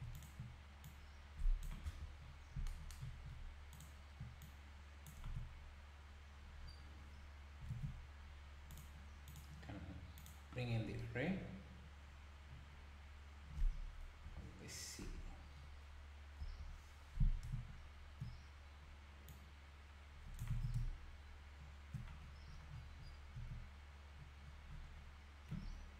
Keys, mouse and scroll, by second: 0.1 alt+click, 0.8 click, 1.9 KP_1, 2.2-2.6 scroll up 1, 3.7 alt+click, 4.4 click, 5.3 Tab, 5.6-6.6 scroll down 1, 6.6-7.0 scroll up 1, 7.7 alt+a, 8.2 scroll down 2, 8.7 click, 9.3 click, 10.2 click, 10.7 scroll down 5, 11.3-11.8 scroll up 2, 12.0-12.4 scroll down 1, 13.8-14.2 scroll down 7, 14.2 KP_7, 15.1 KP_Divide, 15.6-16.2 scroll down 1, 16.4 KP_7, 19.3 click, 20.6 ctrl+z, 22.2-23.3 scroll up 20, 23.3 z, 24.4-25.5 scroll down 11.